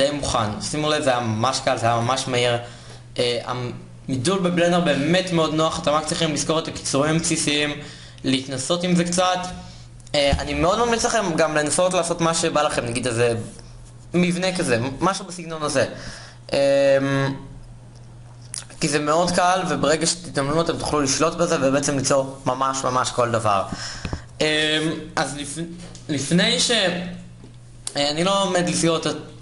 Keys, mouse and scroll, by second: 27.8 KP_1.